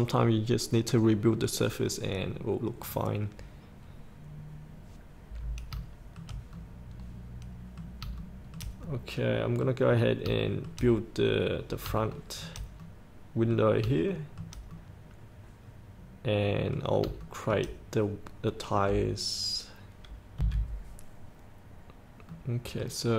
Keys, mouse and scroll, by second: 4.7-5.9 scroll up 1, 5.9 shift+middle click, 6.7 middle click, 8.5 shift+middle click, 9.2 middle click, 10.1-10.4 scroll down 1, 10.6 shift+middle click, 12.3 shift+middle click, 13.0 middle click, 14.3 shift+middle click, 14.9 middle click, 17.5 shift+middle click, 20.5 F8, 22.0-22.5 scroll up 1, 22.5 middle click.